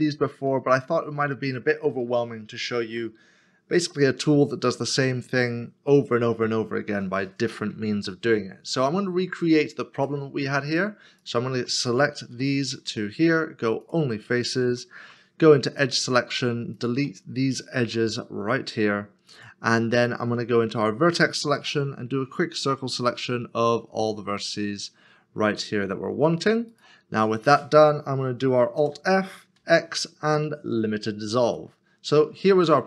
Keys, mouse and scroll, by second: 0.0 scroll up 1, 0.8 middle click, 2.2 shift+middle click, 11.2 shift+click, 12.3 x, 15.0 x, 16.8 shift+click, 17.8 x, 20.6 x, 21.5 1, 22.2-22.5 scroll up 1, 22.5-23.3 scroll down 1, 26.7 right click, 28.8 alt+f, 32.5 middle click.